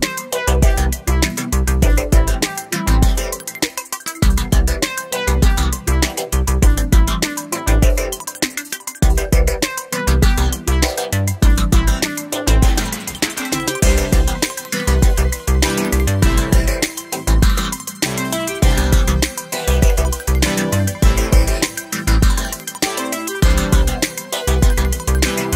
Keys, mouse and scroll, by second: 0.6-1.5 scroll up 2, 1.5-1.8 scroll up 1, 2.6-3.2 shift+middle drag, 3.2 Tab, 3.4 middle click, 3.8 ctrl+e, 4.6 ctrl+r, 5.5 shift+middle click, 5.8 scroll up 1, 6.0 middle click, 6.7 shift+click, 7.6-8.8 shift+drag, 8.8 Tab, 9.0-10.3 middle drag, 10.3 Tab, 10.5 scroll down 3, 10.7 middle click, 11.6 click, 11.8-12.4 scroll up 3, 12.4 scroll down 1, 12.6-14.9 middle drag, 14.9 click, 15.4 3, 15.6 shift+click, 17.0 shift+d, 19.0 p, 19.5 Tab, 19.7 click, 20.1 Tab, 20.5 KP_7, 20.9 shift+middle click, 21.1 scroll up 2, 21.4 shift+middle click, 21.8 Tab, 22.3 Tab, 22.6 1, 22.9 click, 23.4 g, 24.1 scroll down 1, 24.3 shift+middle click, 24.8 scroll up 1, 24.9 shift+middle click, 25.2 click.